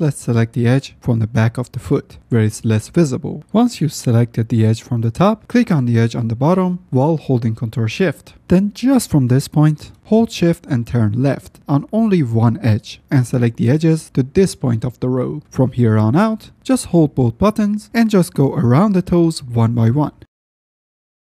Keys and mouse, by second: 0.5 alt+click, 0.9 shift+middle click, 1.1 shift+click, 2.2 shift+middle click, 10.1 ctrl+shift+click, 15.2 middle click, 16.7 ctrl+shift+drag, 17.8 KP_Decimal, 18.5 ctrl+z, 19.0 click, 19.7 click, 20.6 click, 20.7 ctrl+shift+z, 21.0 click.